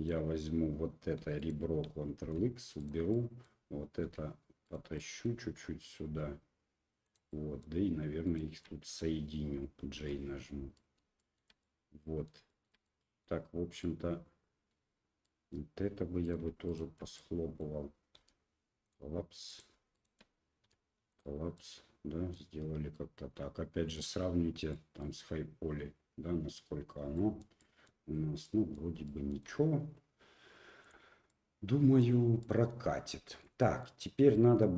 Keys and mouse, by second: 1.2 2, 1.4 right click, 2.2 ctrl+x, 2.8 right click, 3.1 click, 4.0 1, 4.6 right click, 4.9 click, 6.1 g, 7.3 click, 8.2 shift+click, 9.9 j, 10.2 middle click, 11.2 shift+middle click, 11.6 middle click, 12.5 shift+middle click, 12.8 middle click, 13.8 middle click, 15.2 middle click, 16.2 right click, 17.2 middle click, 18.1 m, 19.5 right click, 19.9 shift+right click, 21.5 middle click, 23.9 click, 24.7 middle click, 27.1 shift+middle click, 27.6 shift+middle click, 28.4 middle click, 29.0 shift+middle click, 30.8 click, 31.3 middle click, 32.4 middle click, 33.2 shift+middle click, 33.6 middle click, 34.3 middle click.